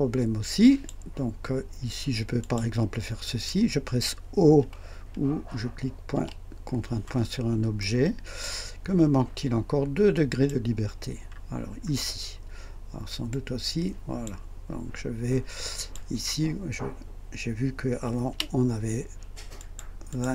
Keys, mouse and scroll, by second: 2.4 click, 3.2 click, 6.1 o, 7.2-7.6 scroll down 1, 7.8-8.6 right drag, 10.3 click, 11.7 scroll up 1, 13.3-14.4 drag, 15.7 click, 18.3 l, 19.6 click, 20.1 click.